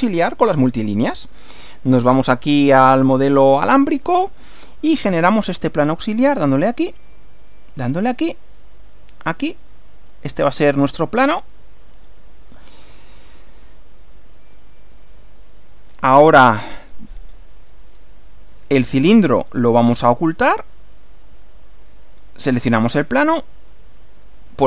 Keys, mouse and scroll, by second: 1.4 click, 2.2 click, 4.6 click, 6.3 click, 7.8 click, 9.3 click, 11.7 click, 14.5 click, 15.2 click, 16.9 click, 18.0-18.8 drag, 19.3 right click, 21.4 click, 22.4 click, 23.6 click.